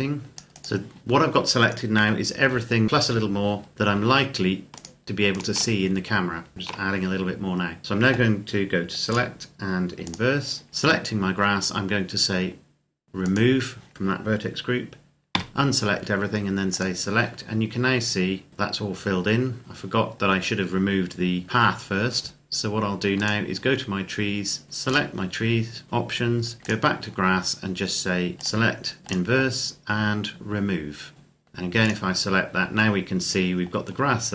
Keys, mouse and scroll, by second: 0.3 right click, 1.8 KP_7, 2.8-3.4 scroll down 1, 3.6 scroll up 1, 4.6 shift+right click, 5.6-6.2 scroll down 1, 6.5 shift+right click, 8.9 click, 13.0 click, 15.1 a, 16.6 click, 17.6 scroll down 1, 18.5 scroll up 1, 19.0-19.9 scroll down 1, 23.0 click, 26.6 click, 31.1 click.